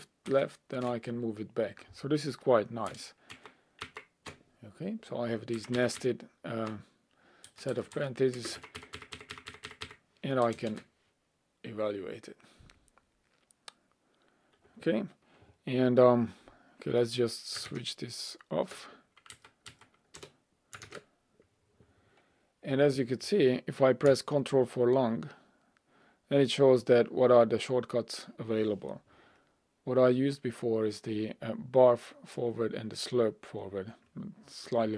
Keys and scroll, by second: 0.3 ctrl+Left, 3.3 ctrl+shift+Right, 3.9 ctrl+Right, 5.7 Right, 19.3 alt+Up.